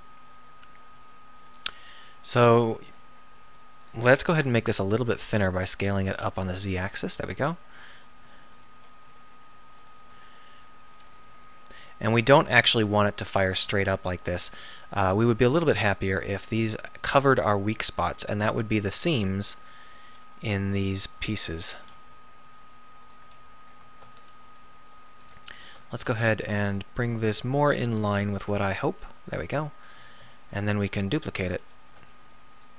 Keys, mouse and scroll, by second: 0.9 g, 3.0 r, 4.9 s, 7.9 g, 9.1 r, 10.1 g, 12.9 KP_7, 13.5 KP_9, 13.9 KP_7, 16.3 r, 17.7 g, 21.8 g, 25.9 s, 28.6 s, 30.5-31.8 middle drag.